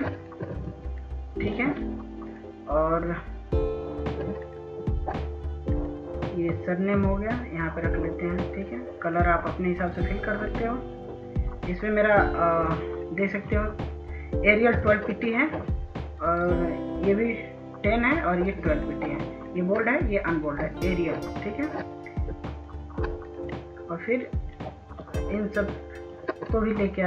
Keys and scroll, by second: 24.4 F2.